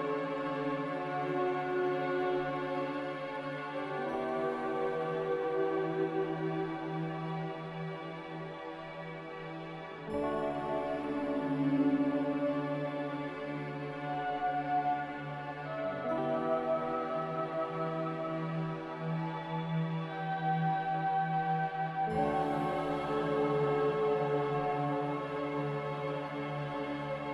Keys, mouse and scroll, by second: 0.6 a, 3.6 ctrl+c, 4.3 ctrl+r, 9.0 Delete, 12.2 ctrl+c, 12.4 ctrl+v, 13.4 a, 14.1 ctrl+c, 14.2 ctrl+v, 18.0 z, 26.0 x.